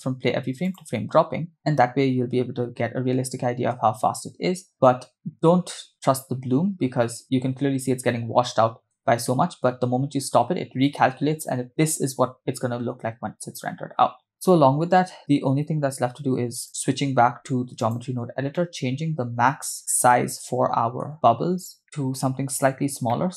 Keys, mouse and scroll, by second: 1.5 space, 3.9 space, 4.8 space, 9.0 space, 14.3 space, 16.6-18.0 drag, 18.5 middle click, 19.9-21.1 middle drag, 19.9 scroll down 4, 21.6 scroll down 1, 21.8 middle click, 21.8 scroll up 4, 22.9 scroll up 1, 23.1 middle click.